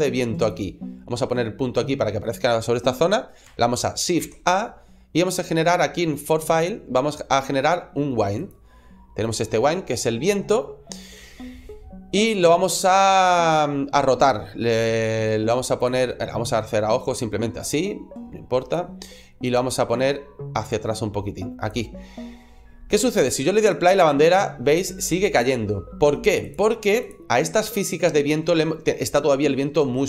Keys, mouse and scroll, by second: 0.3 click, 1.1 middle click, 4.0 shift+a, 8.9 scroll down 1, 9.2 middle click, 9.8-10.4 scroll up 4, 10.9 scroll down 2, 15.6 click, 16.8 click, 19.3 click, 20.5 click, 21.9-23.4 scroll down 2, 23.4 click, 26.3 click, 27.0 click.